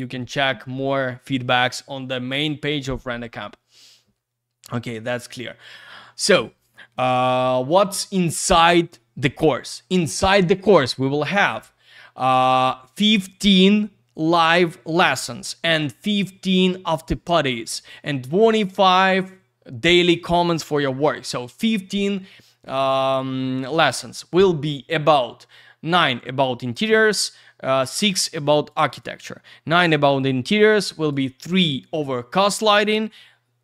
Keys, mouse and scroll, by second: 4.2-4.7 scroll up 1, 5.0 scroll up 1, 26.3 scroll down 1.